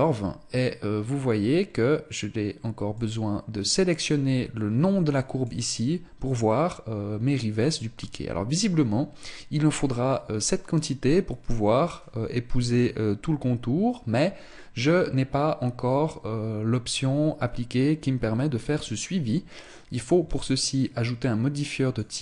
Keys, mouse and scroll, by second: 1.2-2.3 scroll down 1, 2.3 click, 2.3-3.9 scroll down 1, 5.9-6.5 scroll down 4, 6.7 scroll down 2, 7.2-9.9 scroll up 1, 13.9-15.6 scroll up 2, 19.9 click.